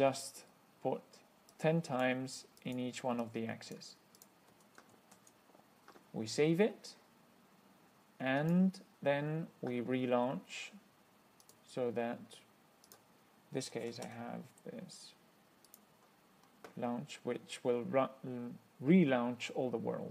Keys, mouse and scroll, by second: 1.8 click, 2.9 click, 3.5 click, 4.4 click, 5.4 ctrl+s, 8.7 click, 11.7 click, 13.1 click, 13.7-14.8 typing, 15.9 click.